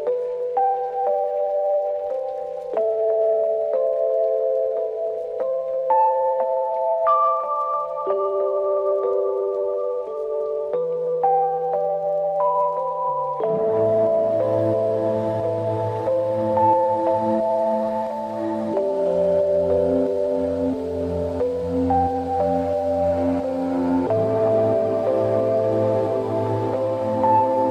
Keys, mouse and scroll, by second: 0.4 scroll down 1, 0.5 middle click, 0.7 alt+right click, 2.3 scroll down 1, 2.5 alt+click, 2.8 alt+right click, 3.0 alt+middle click, 3.2-3.6 alt+right click, 3.7 click, 4.5 scroll down 1, 4.7-7.2 drag, 8.1 alt+middle click, 8.3 alt+right click, 8.4 alt+click, 9.2 alt+right click, 9.4-9.7 alt+click, 9.6 alt+right click, 9.8-10.1 alt+click, 10.2 alt+right click, 10.3 alt+middle click, 12.6 click, 12.9 q, 13.5 click, 13.9 alt+middle click, 14.3 click, 14.8 ctrl+z, 15.1 click, 19.5 shift+click, 20.3-20.8 alt+click, 21.9 scroll down 1, 22.1-23.9 alt+drag, 23.9 alt+right click, 24.1 alt+middle click, 24.8 click, 26.1 alt+middle click, 26.3 alt+right click, 27.1-27.5 click.